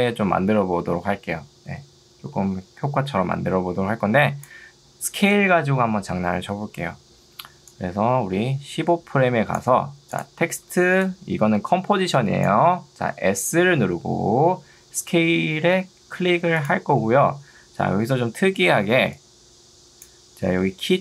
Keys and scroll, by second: 10.8 ctrl+2, 13.0 Escape, 13.8 s, 18.6 ctrl+2.